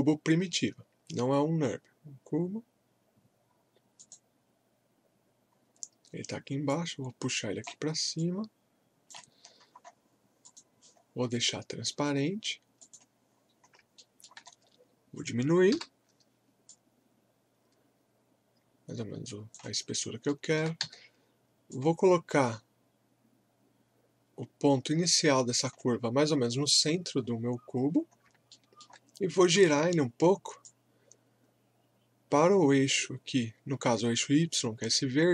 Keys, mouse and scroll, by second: 4.0 click, 5.5-6.0 scroll down 1, 6.7-9.4 drag, 9.4-9.7 scroll up 1, 10.1 typing, 10.4 click, 11.0-11.3 scroll up 1, 12.8 click, 13.3 scroll up 1, 13.3 typing, 14.0 alt+middle click, 14.5 scroll up 1, 15.7 r, 16.7-19.9 drag, 19.9 scroll up 1, 20.3 alt+middle click, 21.7-27.3 drag, 27.2 scroll up 1, 28.5 alt+middle click, 29.5 e, 30.6 click, 30.6-35.3 drag.